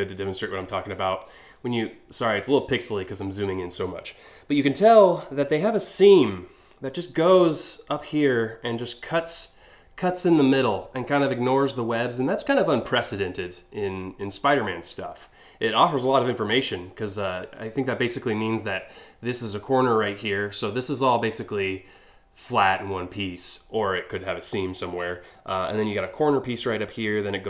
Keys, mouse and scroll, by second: 0.9-2.6 drag, 3.5 scroll up 1, 4.0 scroll down 2, 4.4 scroll up 1.